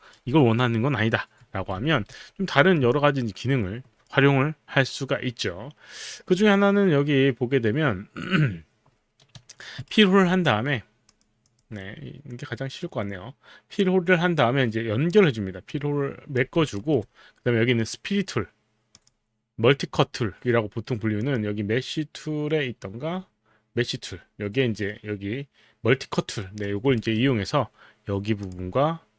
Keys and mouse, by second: 0.0 alt+click, 1.4 z, 1.8 z, 2.9 alt+click, 6.0 click, 9.8 right click, 11.1 click, 11.4 click, 15.7 click, 16.9 alt+right click, 21.2 click, 27.0 alt+right click, 28.4 click.